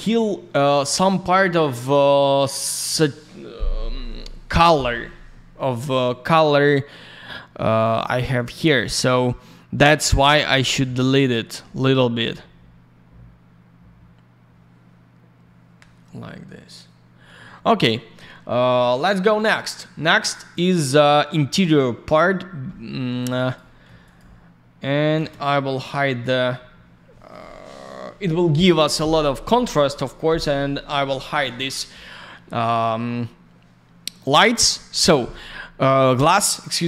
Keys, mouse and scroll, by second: 5.8 click, 5.9 click, 8.3 click, 8.4 click, 20.0 click, 21.5 alt+middle click, 22.4 scroll down 1, 22.6 alt+middle click, 23.2 alt+я, 23.4 click, 23.5 click, 23.6 middle click, 24.0 click, 24.1 click, 25.1 ctrl+space.